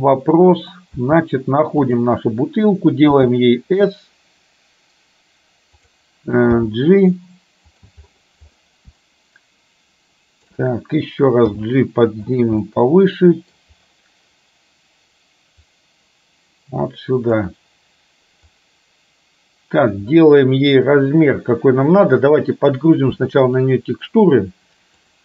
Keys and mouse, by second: 0.0 middle click, 1.1 g, 3.1 s, 6.7 g, 9.2-10.5 shift+middle drag, 11.7 g, 12.8 middle click, 16.0-17.5 drag, 18.7-20.0 drag.